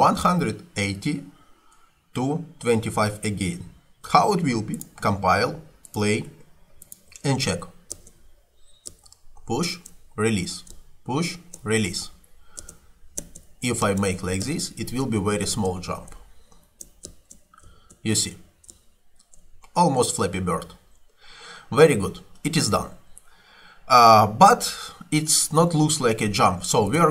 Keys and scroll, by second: 8.0 space, 12.8 space, 20.6 Escape.